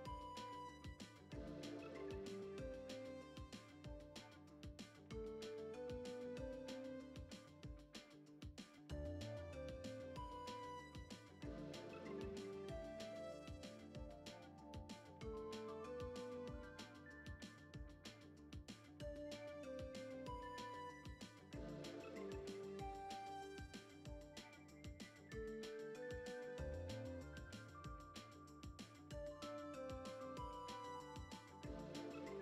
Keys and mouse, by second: 2.6 click, 3.3 click, 4.1 click, 4.8 click, 6.0 click, 6.3 click, 7.2 click, 8.0 click, 8.4 click, 9.2 click, 9.9 click, 11.1 click, 12.4 click, 12.8 shift+middle click, 13.8 click, 14.4-16.4 middle drag, 16.8-17.3 drag, 18.1 shift+middle click, 19.3 middle click, 20.9-21.4 drag, 21.6-22.1 middle drag, 22.1-22.7 drag, 23.1 shift+a, 24.6 middle click, 25.4 click, 26.2 click, 28.7 F6, 28.7 n, 29.2 a, 29.5 middle click, 30.2 KP_1, 30.7 u.